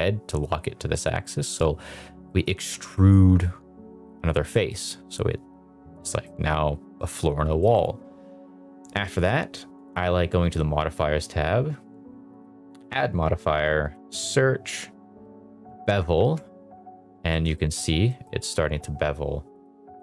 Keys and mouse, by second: 1.4 click, 2.2 middle click, 2.6 Tab, 2.9 middle drag, 4.5 middle drag, 5.9 middle drag, 6.9 middle drag, 7.5 middle click, 12.2-16.1 drag, 17.3 middle click, 17.5 shift+middle drag, 18.0 middle click, 19.6 drag, 19.9 middle drag.